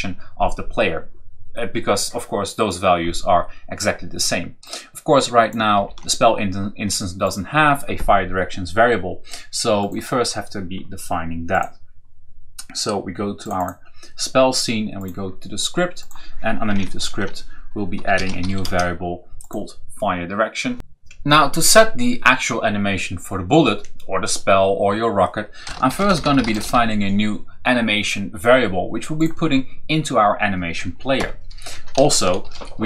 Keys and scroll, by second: 5.6 ctrl+c, 16.5 Return, 16.8 ctrl+v, 17.8-18.8 typing, 25.2-27.0 typing, 30.4 o, 31.0 Return, 32.0 shift+s.